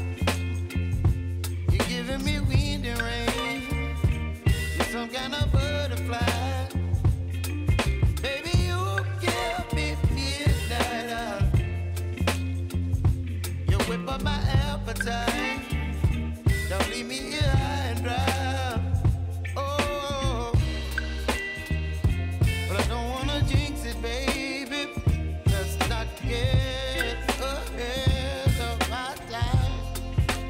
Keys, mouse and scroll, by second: 2.1 space, 4.1 click, 6.7 t, 7.6 click, 9.1 Return, 10.4 click, 11.5 Return, 13.0 click, 14.3 space, 16.7-18.3 drag, 18.3-18.9 typing, 19.2-27.8 drag, 27.8 v, 29.3-30.4 drag.